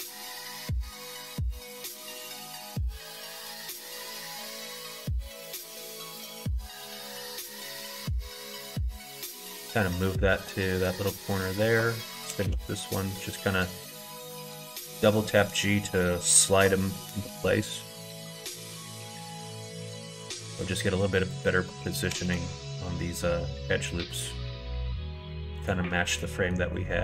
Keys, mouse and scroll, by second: 4.3 alt+click, 4.6 middle click, 6.1 alt+click, 6.9 g, 10.5 shift+middle click, 11.5 alt+click, 12.2 g, 14.7 middle click, 15.2 shift+middle click, 17.0 g, 18.5 middle click, 19.1 middle click, 21.1 alt+click, 22.1 g, 26.2 middle click.